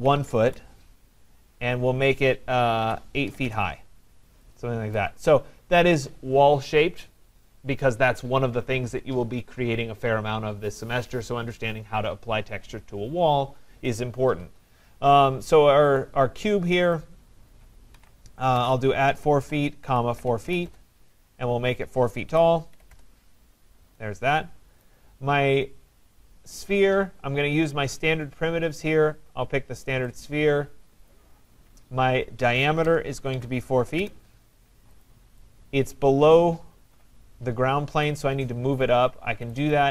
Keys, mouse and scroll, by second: 0.0-1.0 typing, 2.8-3.8 typing, 5.0 right click, 5.3 middle click, 5.3 middle click, 5.4 middle click, 5.7 middle click, 5.8 middle click, 5.9 middle click, 6.0 scroll, 16.0 click, 17.0 click, 17.9-21.0 typing, 22.3-23.4 typing, 24.8 right click, 26.7 right click, 30.2 click, 31.1 click, 32.4-34.0 typing, 35.0 click, 35.5-36.3 typing, 37.8-38.5 typing, 38.0 right click, 39.5 click, 39.7 click.